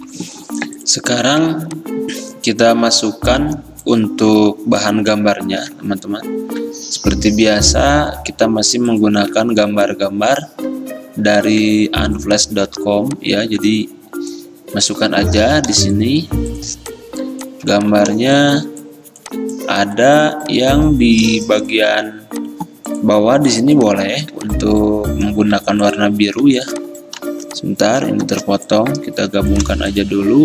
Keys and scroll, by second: 10.1 alt+Tab, 12.9 alt+Tab, 24.4 ctrl+z, 28.3 m, 29.7 v.